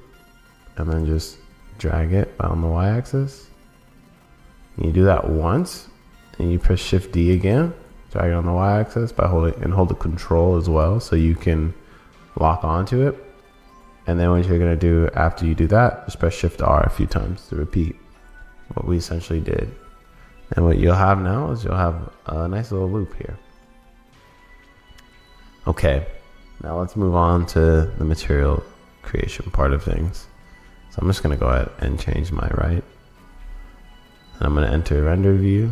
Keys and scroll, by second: 22.4 super+s.